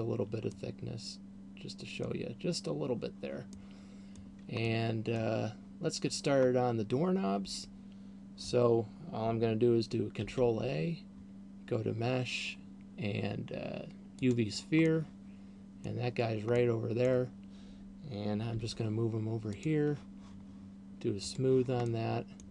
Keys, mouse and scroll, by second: 0.9 middle click, 4.1 middle click, 5.1 middle click, 6.9 scroll down 1, 10.9 shift+a, 14.9 middle click, 17.1 middle click, 19.1 g, 20.1 click, 21.6 click, 22.4 middle click.